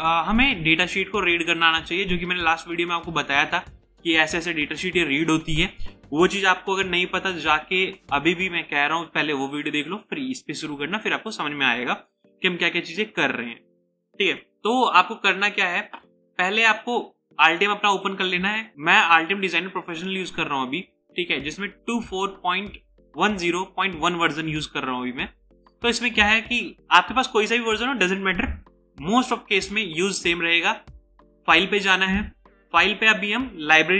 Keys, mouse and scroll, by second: 2.6-4.0 scroll up 1, 15.5 double click.